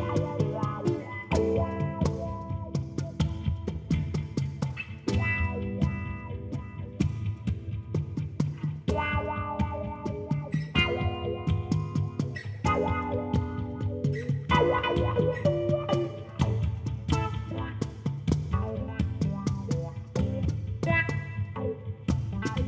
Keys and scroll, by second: 4.4 i, 21.4 5, 21.7 1, 21.9 2, 22.4 Return.